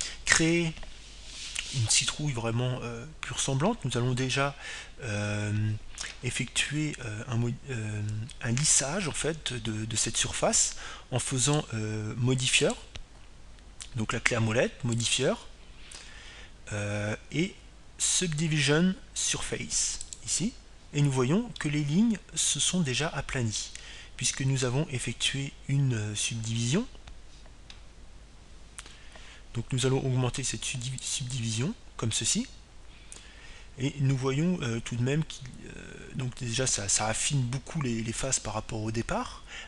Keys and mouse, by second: 13.3-16.1 drag, 16.8-22.0 drag, 23.5-25.4 middle drag, 32.9-34.8 drag, 34.3-35.7 middle drag, 35.8 middle click.